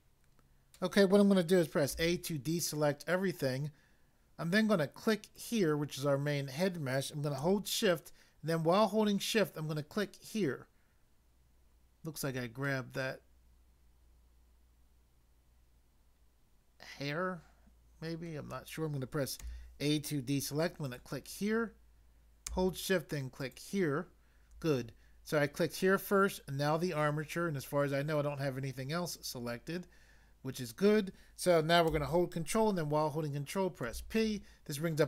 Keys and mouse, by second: 1.9 a, 5.3 click, 9.9 shift+click, 12.6 middle click, 19.4 a, 20.8 click, 23.4 shift+click, 33.8 ctrl+p.